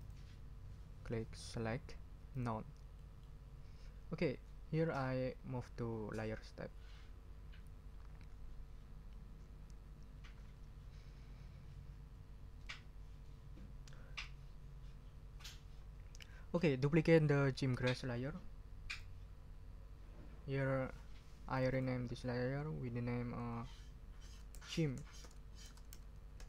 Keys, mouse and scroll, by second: 0.0 click, 2.3 click, 2.9-3.4 scroll up 2, 4.9-5.9 scroll up 6, 18.9 click, 21.5 click, 23.9-26.4 typing.